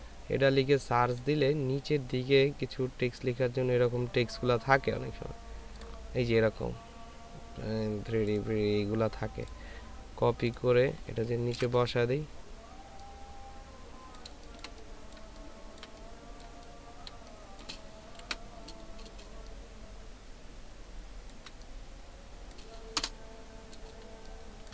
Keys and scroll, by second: 0.8-1.5 typing, 14.6 ctrl+space, 15.2 ctrl+space, 18.2 ctrl+t, 23.0 Return, 24.1 ctrl+space.